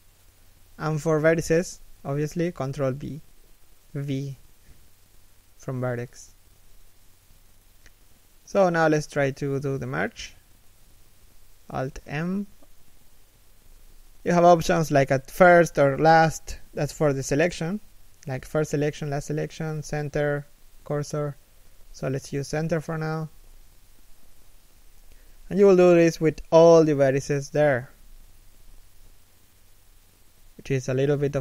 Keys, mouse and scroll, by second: 1.9 ctrl+v, 8.1 ctrl+f, 11.7 ctrl+v, 22.0 z, 22.4 middle click, 23.0 z, 24.0 z, 24.6 middle click, 25.0 z, 25.2 right click, 25.5 shift+right click, 26.5 alt+m, 27.3 z, 27.7 middle click, 28.9 z, 29.6 middle click, 30.1 a, 30.8 ctrl+n.